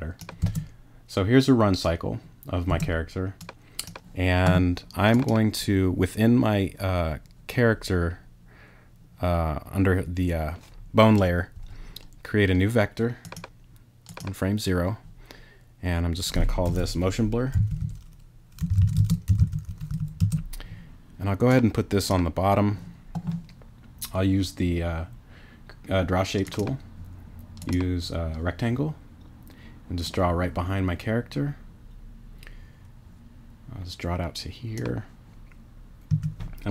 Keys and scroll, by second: 0.4 space, 2.7 space, 17.3-20.4 typing, 36.1 a.